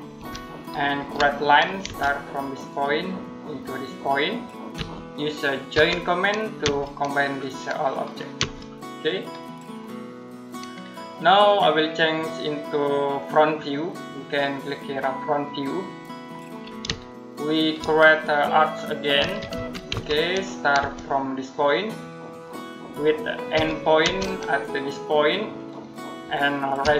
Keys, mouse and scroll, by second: 0.0 Delete, 0.8 l, 1.7 space, 2.5 click, 4.6 space, 5.6 j, 6.5 space, 7.1 click, 8.2 space, 9.4-10.0 scroll down 1, 10.0 middle click, 13.0 click, 16.1-16.7 scroll down 1, 16.8 shift+middle click, 17.9 middle click, 18.8-20.6 typing, 22.1 click, 23.4 e, 23.9 space, 25.4 click, 26.7 r.